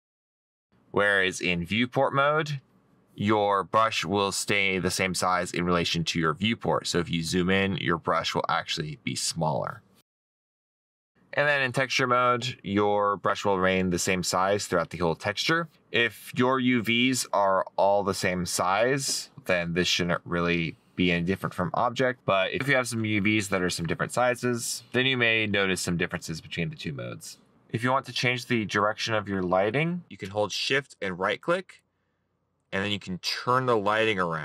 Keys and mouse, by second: 4.9 right click, 6.2 right click, 8.1 right click, 32.7 right click.